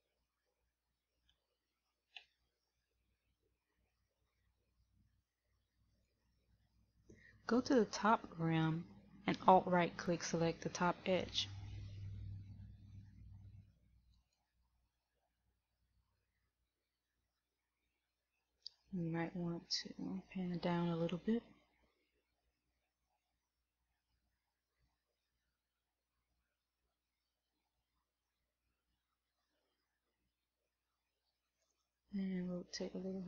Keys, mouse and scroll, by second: 0.1 s, 14.2 alt+right click, 23.3 shift+middle click, 32.1 middle click.